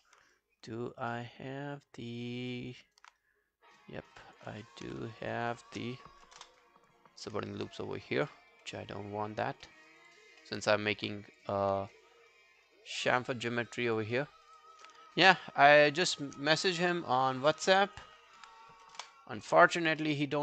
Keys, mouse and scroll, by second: 0.0 alt+middle click, 0.4 alt+click, 1.1 alt+middle click, 2.8 alt+right click, 3.2 right click, 4.3 double click, 4.6 alt+middle click, 5.2 shift+click, 5.4 shift+click, 6.4 ctrl+BackSpace, 7.2 scroll down 1, 7.6 alt+click, 8.3 alt+middle click, 8.5 alt+right click, 8.8 alt+click, 9.7 alt+middle click, 9.9 alt+right click, 10.1 alt+click, 10.5 alt+middle click, 10.6 alt+right click, 11.5 double click, 11.7 scroll down 2, 11.9 alt+click, 13.3 alt+middle click, 13.6 alt+right click, 13.8 alt+click, 14.2 alt+middle click, 14.4 alt+right click, 14.6 alt+click, 15.8 shift+click, 16.0 shift+click, 16.5 scroll down 2, 16.8 alt+click, 19.0 ctrl+BackSpace, 20.0 alt+middle click, 20.3 alt+right click.